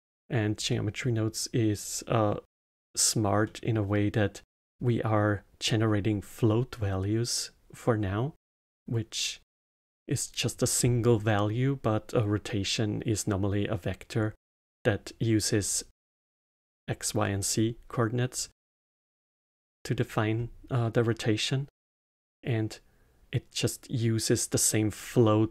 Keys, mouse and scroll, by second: 0.6-6.5 middle drag, 19.6-20.3 middle drag, 20.3-21.1 scroll up 1.